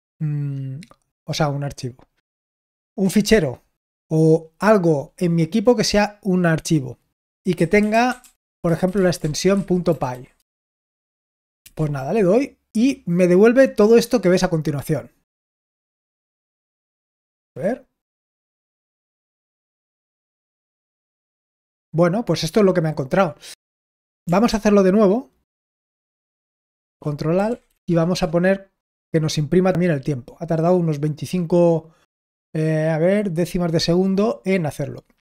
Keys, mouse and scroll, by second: 7.4-11.5 typing, 16.7-17.5 typing, 24.4 ctrl+p, 25.8 ctrl+a, 26.4 ctrl+p, 27.4 ctrl+a, 28.7 typing.